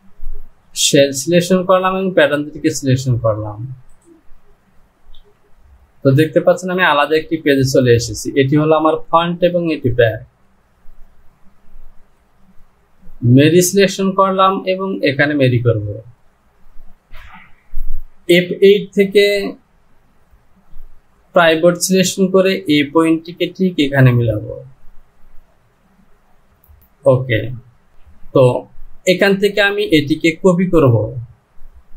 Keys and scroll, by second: 5.2 KP_7, 17.1 Home.